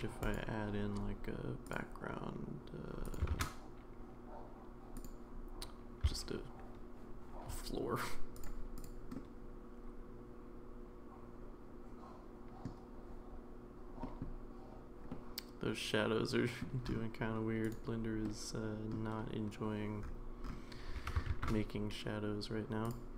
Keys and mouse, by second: 0.3 drag, 3.3 shift+a, 6.0 s, 9.1-12.7 middle drag, 14.0 middle drag, 15.1-16.6 middle drag, 17.6 click, 18.2-18.9 middle drag, 21.0 g.